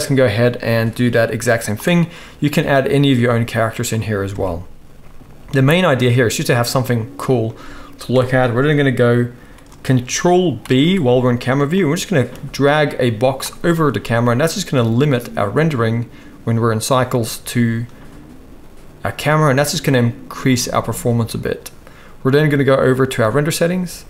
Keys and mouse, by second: 0.0-23.1 right drag, 4.3 KP_0, 10.6 ctrl+b, 23.1 middle click, 23.3-24.0 right drag.